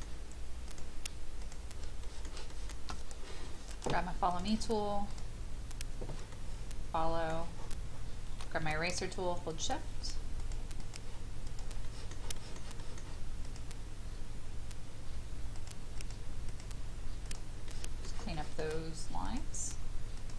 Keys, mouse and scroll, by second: 0.6 shift+click, 1.4 shift+click, 2.0 shift+middle click, 4.3 click, 6.3 middle click, 7.6 scroll up 1, 9.5 shift+click, 10.4 shift+click, 10.8 shift+click, 11.5 shift+click, 11.8 shift+middle click, 12.3 shift+middle click, 12.8 shift+middle click, 13.4 shift+click, 15.5 shift+click, 15.9 shift+click, 16.5 shift+click, 17.2 shift+click, 17.7 shift+middle click, 18.3 shift+middle click, 19.2 shift+click, 20.2 shift+click.